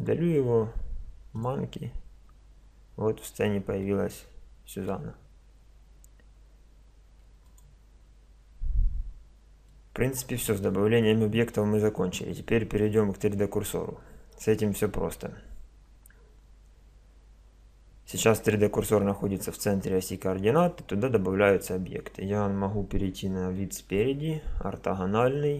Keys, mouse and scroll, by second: 1.4-3.0 drag, 3.0 middle click, 3.0 click, 3.2-5.6 middle drag, 7.1 x, 8.8-23.6 middle drag, 23.6 KP_1, 24.4 KP_5.